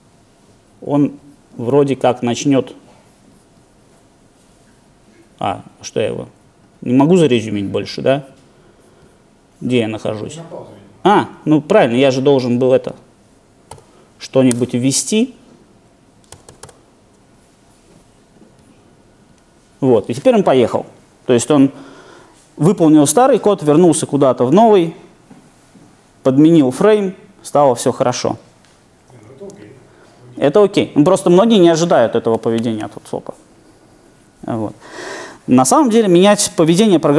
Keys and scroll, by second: 18.4 alt+super+r.